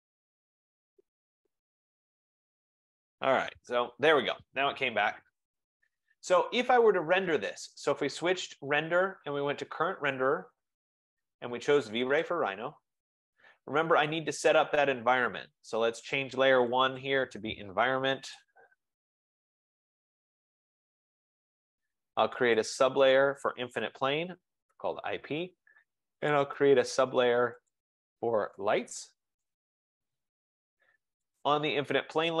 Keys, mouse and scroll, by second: 1.6 click, 4.1-6.7 drag, 8.8-10.2 drag, 12.4 click, 16.5 click, 16.9 click, 17.1 click, 18.4 click, 18.8-21.5 typing, 22.9 click, 23.6-24.8 typing, 26.6 click, 27.9 click, 28.6-30.0 typing, 31.6 click, 32.2 F15.